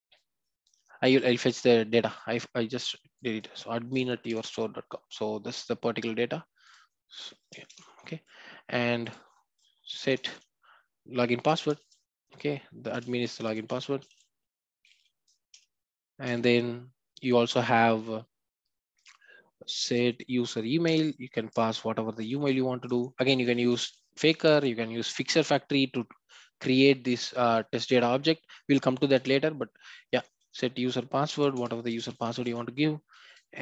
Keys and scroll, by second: 7.7 ctrl+v, 11.8 Return, 20.9 Return, 31.6 Return.